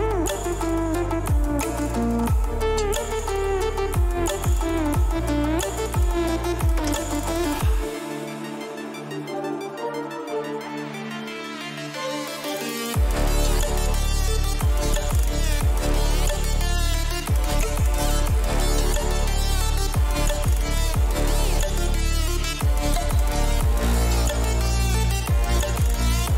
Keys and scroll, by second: 11.8 Up, 12.0 Up, 12.1 Up, 13.3 t, 20.4 v, 21.3 shift+Right, 22.0 Right, 22.3 Right, 22.5 Right.